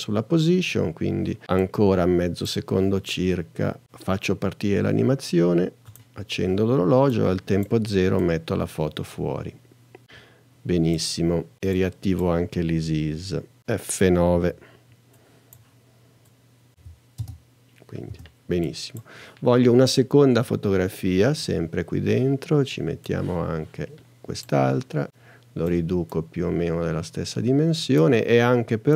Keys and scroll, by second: 14.4 F9, 16.7 n, 17.2 space.